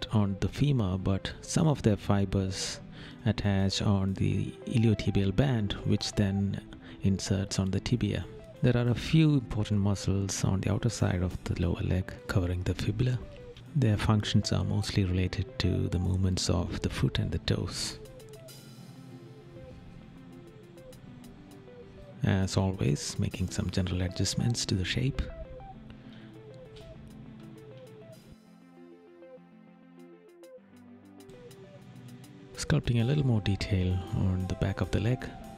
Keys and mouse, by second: 1.4 right click, 3.4 right click, 5.7 right click, 6.9 right click, 8.4 right click, 9.6 right click, 10.7 right click, 11.7 right click, 12.5 right click, 13.2 right click, 13.9 right click, 14.6 right click, 17.3 right click, 19.4 right click, 23.6 right click, 26.0 right click, 26.8 right click, 27.6 right click, 30.7 right click, 31.3 middle click, 33.8 right click.